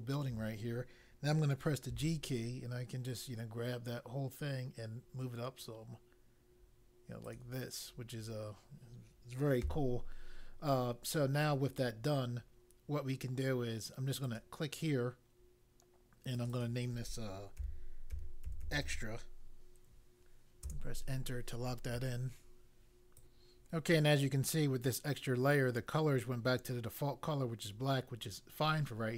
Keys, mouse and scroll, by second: 1.9 g, 7.2 click, 9.5 a, 14.2 click, 16.3 click, 16.5 double click, 17.5-19.3 typing, 20.6 Return, 23.1 click.